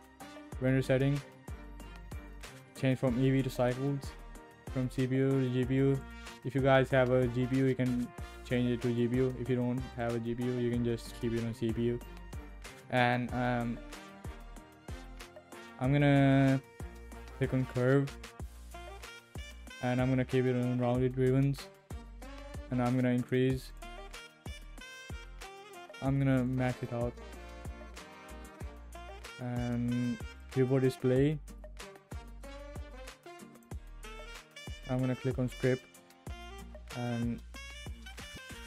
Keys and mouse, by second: 2.3-3.9 drag, 4.8-6.1 drag, 8.5-10.0 drag, 16.9 click, 18.5 click, 23.2 click, 23.8 click, 26.5 click, 30.4 click, 33.5 click, 36.7-37.9 drag.